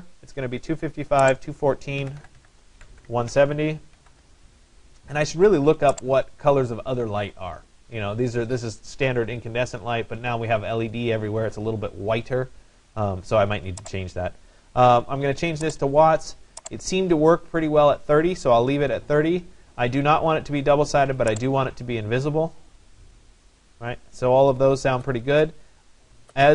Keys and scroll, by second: 1.6-4.1 typing.